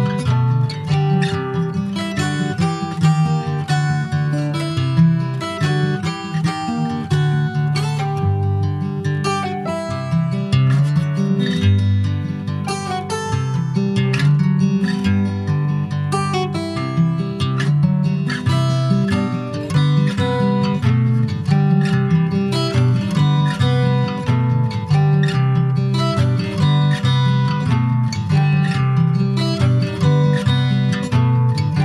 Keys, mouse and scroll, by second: 1.6 middle click, 2.5 e, 3.1 alt+s, 5.4 Tab, 5.7 click, 5.9 scroll down 3, 6.1 middle click, 7.2 shift+middle click, 7.3 shift+scroll up 1, 7.7 middle click, 8.1 scroll up 1, 8.3 click, 8.7-10.2 shift+middle drag, 10.2 ctrl+s, 10.4-11.5 shift+middle drag, 11.5 ctrl+s, 11.6 scroll down 2, 11.7 middle click, 12.4 ctrl+s, 14.7-15.0 scroll up 2, 15.0 middle click, 15.4 ctrl+s, 15.5 click, 18.3 click, 18.7-19.2 scroll down 3, 19.2 ctrl+click, 19.4 click, 20.4 alt+middle click, 20.7 alt+middle click, 21.8 ctrl+s, 22.1 click, 26.8 shift+d, 28.2 click.